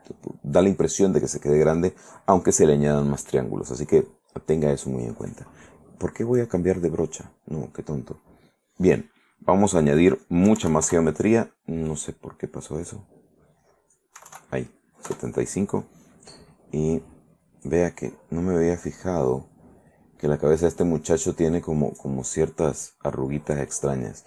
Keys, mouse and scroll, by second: 6.5 click, 8.5 click, 9.0 right click, 9.3 right click, 9.8 right click, 10.7 KP_7, 11.0 KP_Enter, 13.4 click, 14.4 KP_7, 14.5 KP_5, 15.2 KP_Enter, 18.7-24.2 middle drag.